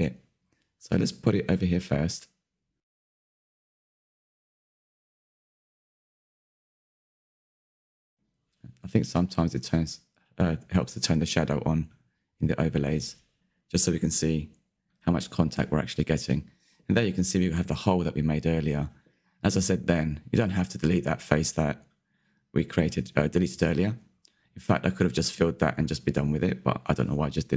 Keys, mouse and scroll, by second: 0.4-1.1 shift+middle drag, 1.1 click, 4.2 KP_Decimal, 5.9 click, 8.3-11.5 middle drag, 11.5-12.2 drag, 12.2-19.6 middle drag, 19.6 /, 20.1 Tab, 21.0 middle click, 21.2 2, 21.6 middle click, 22.4 alt+click, 23.4 s.